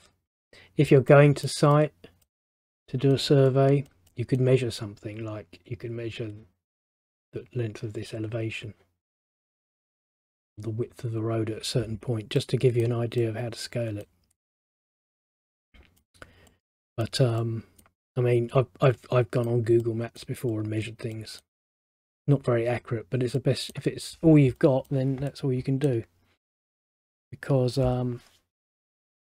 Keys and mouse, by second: 1.2 middle click, 12.5 middle click, 23.5 middle click.